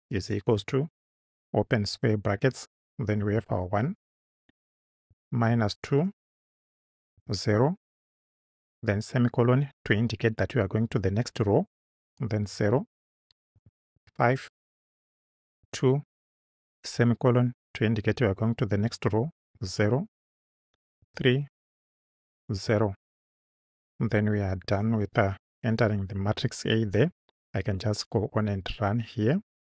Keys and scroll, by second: 0.6 shift+=, 1.9 [, 3.4 1, 4.2 space, 5.5 2, 6.2 space, 7.2 0, 8.7 ;, 12.4 0, 13.0 space, 13.9 5, 14.5 space, 15.7 2, 17.0 ;, 19.5-22.6 typing, 24.7 Right.